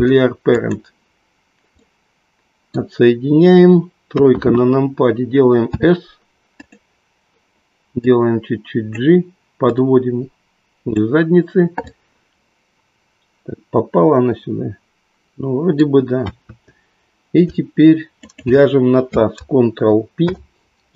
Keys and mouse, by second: 1.8-3.1 middle drag, 4.1 KP_3, 5.6 s, 8.0-9.5 drag, 9.8-11.0 drag, 12.0-16.6 middle drag, 16.6 KP_3, 20.2 ctrl+p.